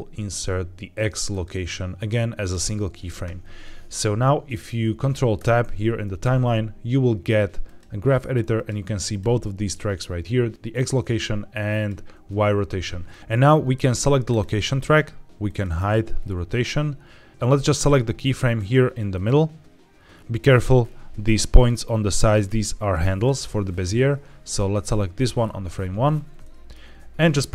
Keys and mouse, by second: 1.2-2.4 right drag, 5.3 ctrl+Tab, 7.5 click, 8.4 click, 9.0 click, 11.6 click, 14.2 click, 15.4 click, 17.6 click, 18.3 click, 19.0 click, 21.4 click, 22.0 click, 22.8 click, 23.6 click, 26.3 shift+middle click.